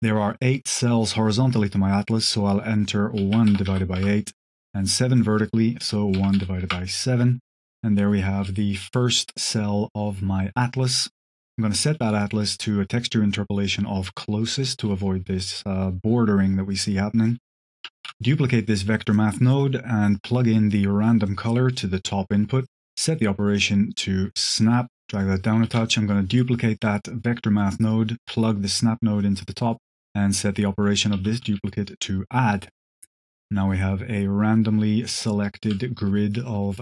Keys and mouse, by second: 5.0-7.1 drag, 8.2 z, 10.7 click, 11.9 click, 16.7 click, 17.1 click, 17.5 click, 18.0 shift+d, 20.0-21.2 drag, 22.6-23.6 drag, 24.3-24.8 drag, 25.0 click, 25.6 shift+d, 26.7 click, 27.8-29.2 drag, 29.8 click, 32.6-35.6 drag, 36.3 click.